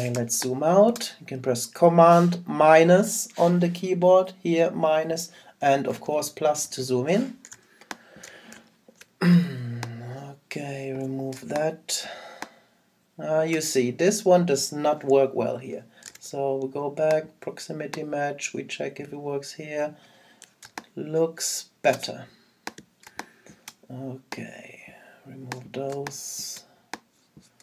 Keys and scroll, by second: 7.5 super+space.